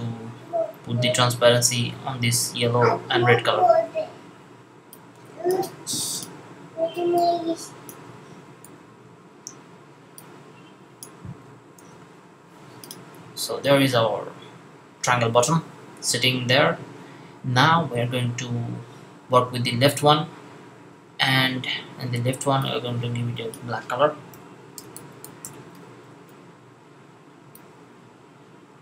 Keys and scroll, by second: 8.5 super+v, 11.6 super+v, 24.1-25.3 typing.